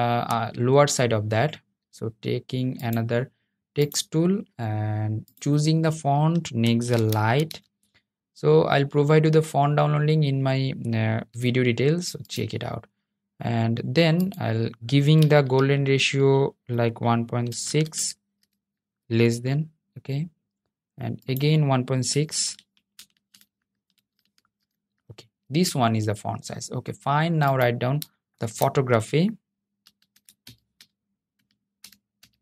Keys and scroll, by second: 4.2 t, 27.5 super+a.